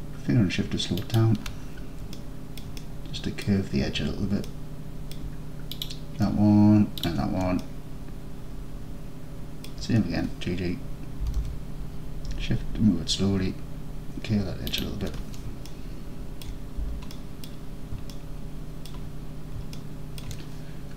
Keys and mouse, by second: 1.1 shift+click, 2.2 alt+click, 2.8-3.5 middle drag, 4.5-5.2 alt+middle drag, 5.8 click, 7.7-8.3 alt+middle drag, 8.3-9.7 alt+drag, 11.3 g, 11.4 g, 14.8 shift+click, 15.7-16.5 alt+drag, 17.2 middle drag, 18.2-18.9 alt+middle drag, 19.8-20.3 alt+middle drag.